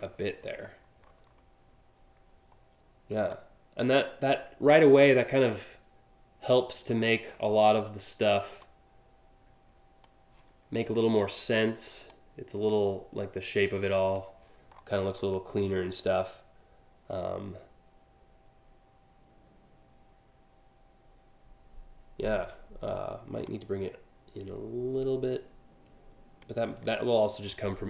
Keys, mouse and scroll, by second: 0.1 scroll up 1, 0.6 scroll up 1, 8.2-9.7 drag, 11.7-13.8 drag, 14.4-14.9 scroll down 2, 23.0-26.0 drag.